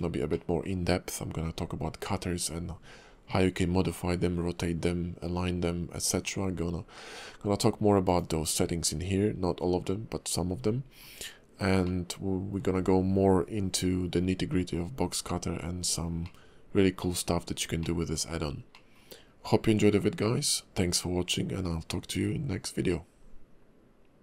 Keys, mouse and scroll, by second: 0.3 shift+middle click, 8.1 click, 11.8 middle click, 15.7-16.2 scroll down 2, 16.2 middle click, 17.3-17.8 scroll up 2, 17.8 middle click, 18.7 middle click.